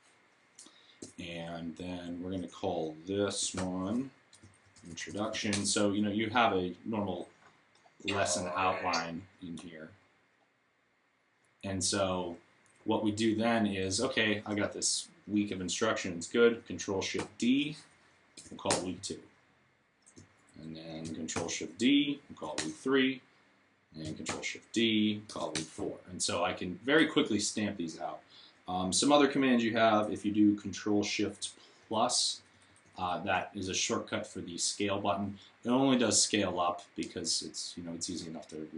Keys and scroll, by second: 3.4 super+r, 3.9-5.6 typing, 17.0 ctrl+d, 18.2 BackSpace, 18.5 Return, 21.1 shift+d, 22.2 BackSpace, 22.4 Return, 24.1 ctrl+shift+d, 25.1 BackSpace, 31.6 ctrl+shift+=, 32.2 shift+=, 32.7 shift+=.